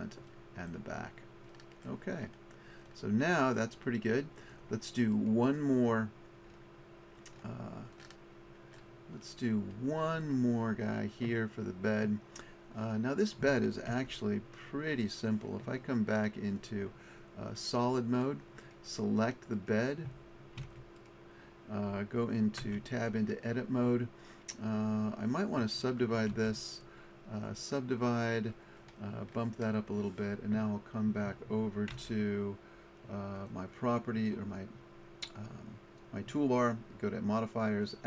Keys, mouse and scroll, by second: 3.5-6.6 drag, 8.0 click, 8.5 middle click, 14.0 Tab, 16.6 click, 18.2-20.6 middle drag, 20.6 Tab, 22.6 Tab, 26.3 w, 29.8 click, 32.0 Tab.